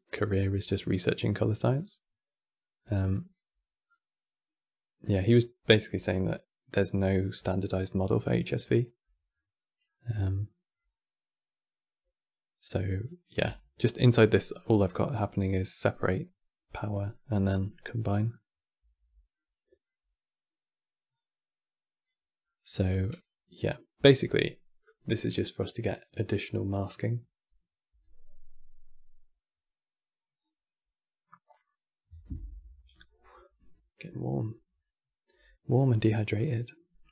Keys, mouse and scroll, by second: 1.4 click, 3.6 click, 5.0 click, 8.7-10.6 middle drag, 10.6-10.9 scroll up 2, 12.5 click, 13.2 Tab, 13.7 middle click, 14.1 scroll down 2, 14.3-18.5 middle drag, 18.5 Tab, 19.0-20.8 middle drag, 20.8-22.1 drag, 22.1 middle click, 22.6 scroll down 4, 22.8-25.9 middle drag, 35.8-37.1 middle drag.